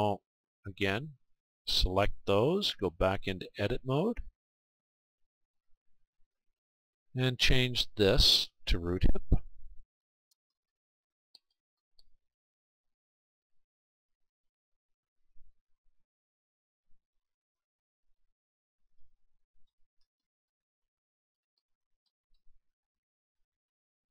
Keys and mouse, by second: 1.6-3.6 right drag, 3.2-5.4 drag, 7.9-16.7 drag, 16.7-18.9 right drag, 18.3-24.1 drag.